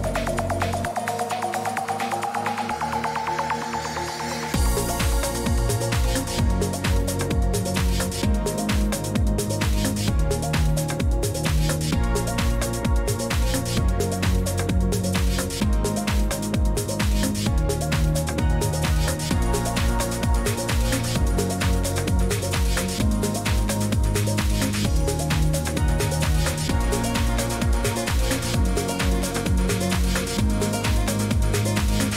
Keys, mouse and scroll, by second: 0.8 click, 1.4 Escape, 6.8-9.3 drag, 29.4 click, 31.2 click, 31.5 click.